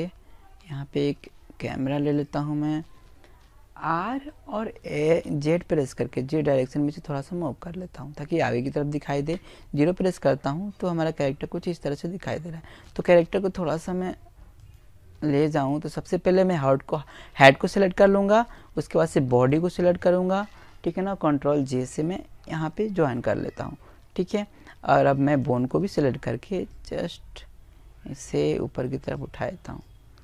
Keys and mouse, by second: 1.9 r, 5.7 click, 7.0 KP_0, 9.8 middle click, 10.6-15.0 right drag, 15.3 right click, 17.1-18.8 right drag, 19.8 ctrl+j, 23.2-24.9 right drag, 24.4 click, 26.9-28.6 drag, 28.4 right click.